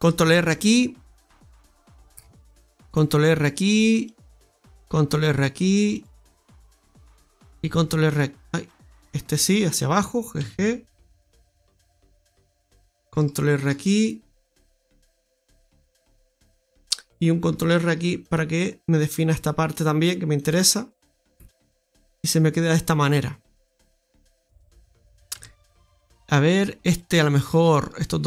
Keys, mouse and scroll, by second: 0.1 ctrl+r, 2.3 ctrl+r, 4.8 ctrl+r, 6.7 middle click, 7.7 ctrl+r, 10.3 g, 13.5 ctrl+r, 15.7 middle click, 17.8 ctrl+r, 20.7-21.0 scroll down 1, 21.2 Tab, 21.5-23.9 scroll down 2, 21.8 middle click, 24.8-25.3 scroll up 3, 25.3 Tab, 25.5 middle click, 26.9 right click, 27.7 shift+right click.